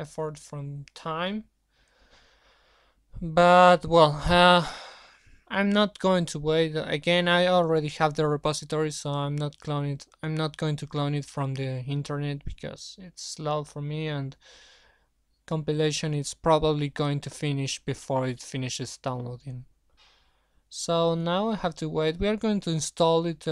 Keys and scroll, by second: 7.4 alt+Tab.